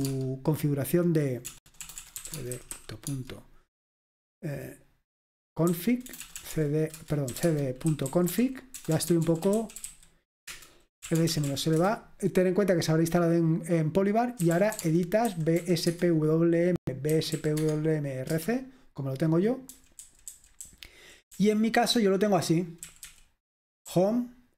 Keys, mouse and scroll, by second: 0.0-0.6 typing, 1.7-3.3 typing, 5.6-12.4 typing, 7.0 Return, 14.3-16.0 typing, 17.1-18.3 typing, 19.9-20.7 typing, 22.2-24.5 typing.